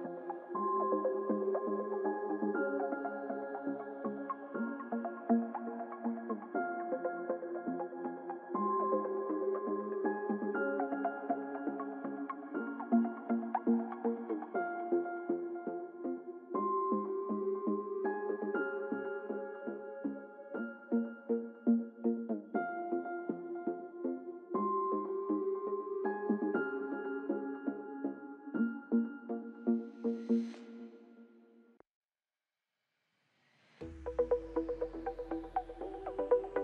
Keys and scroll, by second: 8.2 ctrl+=, 20.9 ctrl+shift+i, 31.6 ctrl+-, 32.3 ctrl+0.